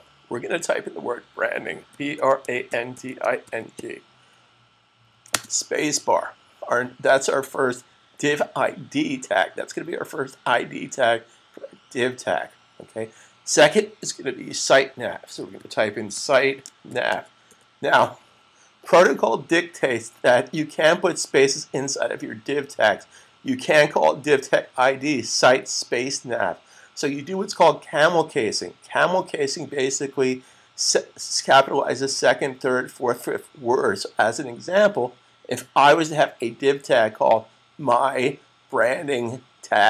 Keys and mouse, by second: 1.5-4.1 typing, 5.2 space, 15.0-17.5 typing.